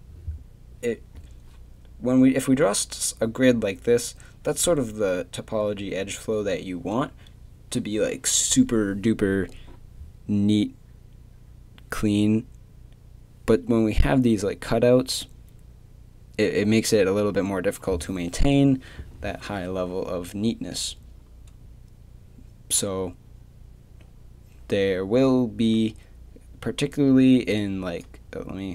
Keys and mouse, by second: 25.6-28.7 middle drag.